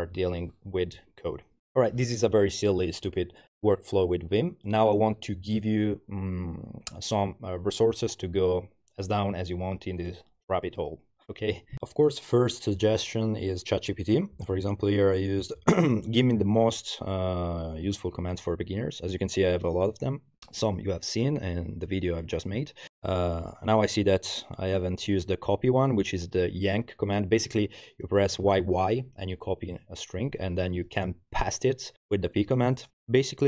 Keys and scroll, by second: 32.9 typing.